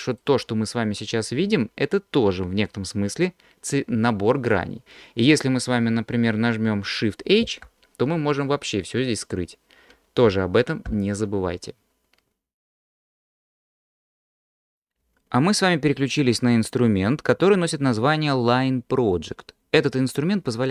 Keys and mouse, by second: 7.7 shift+h, 10.9 alt+h.